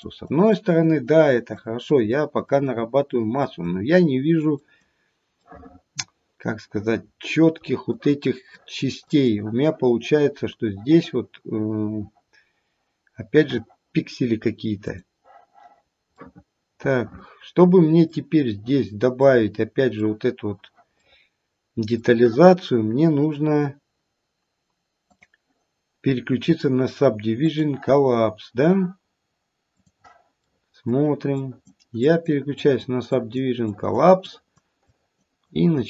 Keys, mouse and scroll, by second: 0.2 click, 0.7 click, 1.2 click, 1.9 click, 2.4 click, 3.4 click, 4.6 click, 5.4 middle click, 5.9 middle click, 7.0 middle click, 7.9 click, 8.5 click, 9.0 click, 15.2 click, 15.8 scroll up 1, 16.1 middle click, 16.5 middle click, 18.3-18.8 scroll down 1, 19.2 middle click, 21.0 middle click, 25.1 click, 29.9 click, 30.4 middle click, 31.3 click, 31.3 middle click, 31.9 click, 32.6 click, 33.1 click, 34.2 click, 34.8 click, 35.3 click.